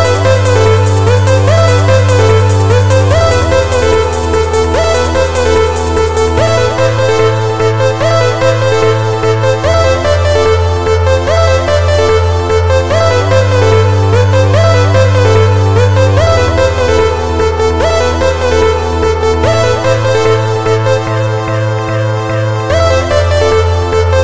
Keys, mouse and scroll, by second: 5.2 click, 6.5 click, 20.4 click.